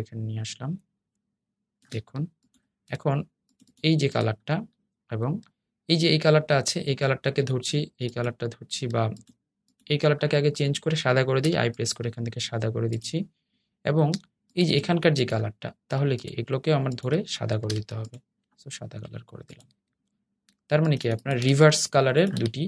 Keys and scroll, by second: 11.1 i, 17.8 i.